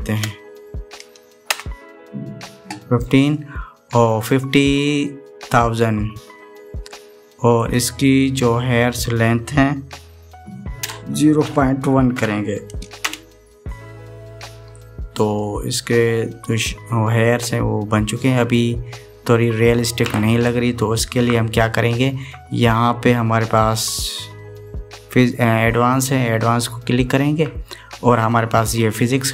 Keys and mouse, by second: 8.3-14.3 drag, 16.2-19.5 middle drag, 27.7 click.